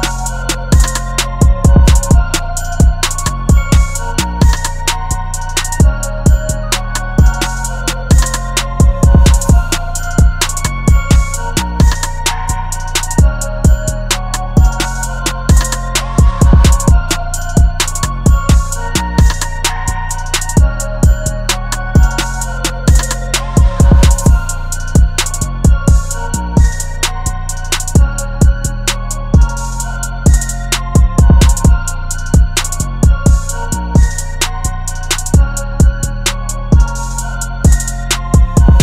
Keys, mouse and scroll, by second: 2.7-3.3 typing, 5.7 typing, 11.3 double click, 14.8 typing.